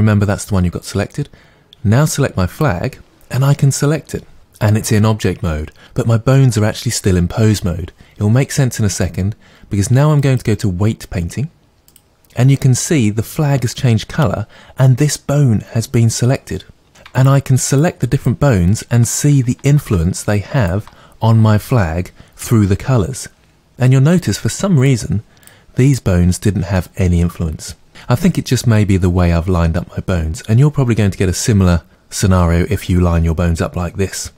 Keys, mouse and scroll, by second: 2.5 click, 10.2-16.9 drag, 17.2-17.8 ctrl+drag, 18.1 ctrl+click, 18.7-19.6 ctrl+drag, 20.6-28.8 ctrl+drag.